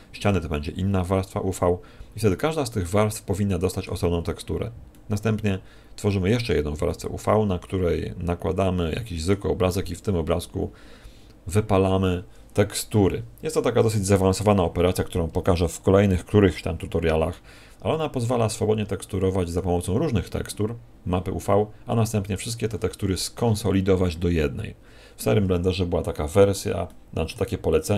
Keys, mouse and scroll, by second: 2.2 middle click, 4.9 middle click, 6.8 middle click, 17.3 middle click, 26.0 middle click, 26.8 middle click, 27.8 middle click.